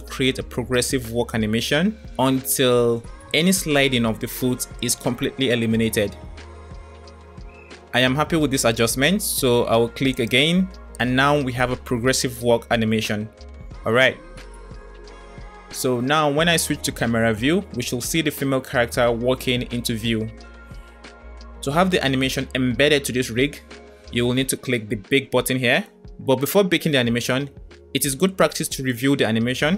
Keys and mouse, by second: 17.0 KP_0, 21.6 middle click, 27.0 space, 27.7-28.0 middle drag.